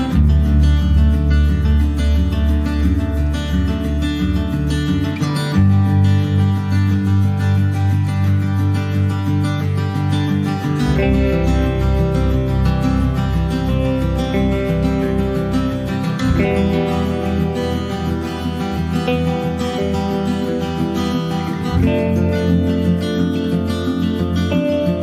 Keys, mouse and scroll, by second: 0.5 s, 1.8 scroll up 2, 2.1 s, 3.3 alt+middle click, 3.9 shift+scroll up 1, 4.2 s, 5.2 click, 7.0 shift+middle click, 7.5 r, 9.0 click, 9.7 middle click, 10.2 scroll up 3, 10.4 Tab, 11.6 click, 12.1 shift+middle click, 12.6 s, 14.7 click, 15.3 alt+middle click, 16.0 shift+middle click, 16.2 s, 17.5 click, 18.0 alt+middle click, 18.8 click, 19.3 shift+middle click, 19.8 e, 21.1 shift+middle click, 21.4 scroll down 1, 21.7-22.8 middle drag, 22.8 s, 24.4 alt+middle click.